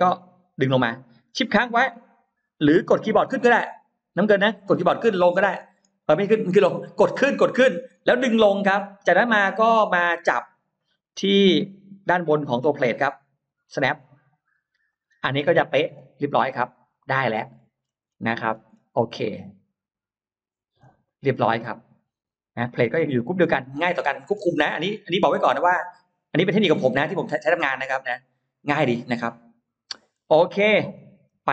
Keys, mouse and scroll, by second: 4.5-5.6 scroll up 2, 4.9 middle click, 5.4 middle click, 7.3-8.0 scroll up 2, 8.6-9.5 scroll down 3, 8.8 middle click, 9.6-11.4 scroll up 3, 14.8 click, 15.6 scroll down 1, 15.8 space, 16.6 middle click, 17.1 scroll down 1, 17.8-18.8 scroll down 6, 19.1-20.6 middle drag, 20.3-20.6 scroll down 1, 20.9 click, 21.4-22.7 scroll up 1, 22.5 middle click, 22.8 scroll down 1, 23.2-24.8 scroll up 3, 23.8 middle click, 25.1 click, 25.8 click, 26.5-27.3 scroll down 1, 27.1-29.9 middle drag, 29.9-30.2 scroll down 1, 30.4 middle click, 30.8 middle click, 31.1-31.5 scroll up 4.